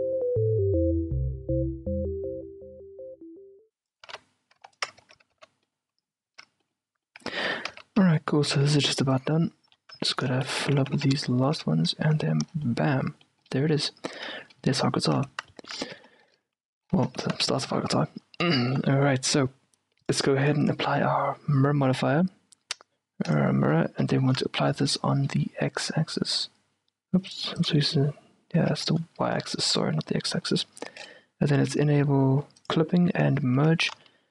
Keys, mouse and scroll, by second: 0.0-4.1 typing, 0.4 middle click, 0.7 right click, 1.7 right click, 2.4 click, 3.0 right click, 3.2 Tab, 3.4 Tab, 4.1-6.1 right drag, 5.1 Tab, 5.4 z, 5.7-9.2 middle drag, 6.4 Tab, 7.4 a, 7.8 z, 8.1 z, 8.6 z, 9.2-12.2 right drag, 10.4-11.2 f, 11.7 f, 12.3 Tab, 12.6-15.2 middle drag, 15.3 Tab, 15.9 a, 16.2 middle click, 16.6 a, 16.8 a, 17.2 Tab, 17.3-18.3 middle drag, 18.6-20.1 middle drag, 20.1-22.6 drag, 23.7-27.4 middle drag, 27.4-29.6 drag, 28.8 q, 29.5-32.7 middle drag, 30.0 z, 32.7-34.3 drag, 33.7 q, 34.0 z.